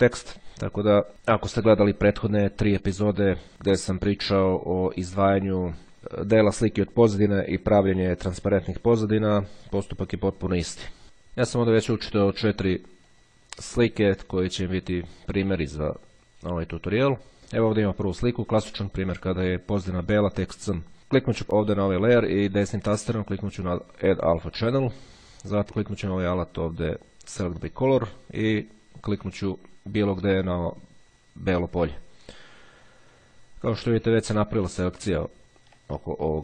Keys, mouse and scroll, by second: 11.1 click, 13.3-15.4 drag, 16.1 click, 21.3 click, 22.4 right click, 24.3 click, 27.6 click, 29.3 click, 34.8-35.8 ctrl+scroll up 2, 35.8-36.3 ctrl+scroll up 1.